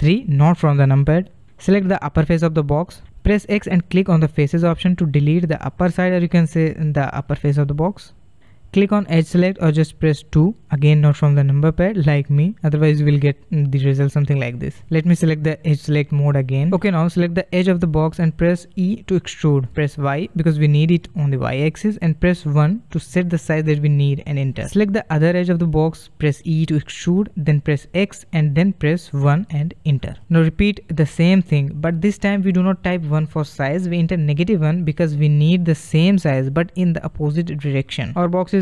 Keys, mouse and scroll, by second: 0.5 3, 1.6 click, 2.2-3.3 scroll up 4, 3.3-4.3 shift+middle drag, 4.3 x, 6.7-9.8 middle drag, 10.1 KP_2, 11.6-12.2 middle drag, 12.2 click, 14.9-16.6 drag, 16.6-17.7 middle drag, 17.7 click, 19.0 e, 25.1 click, 26.1 e, 31.3 click, 32.5 e, 35.0 click, 36.5 e.